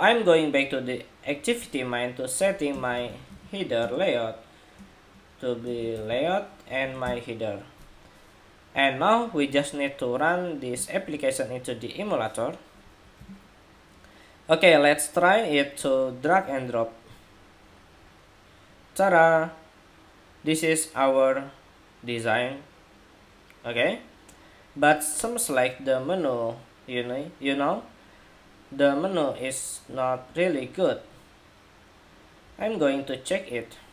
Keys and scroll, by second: 13.3 shift+super+2.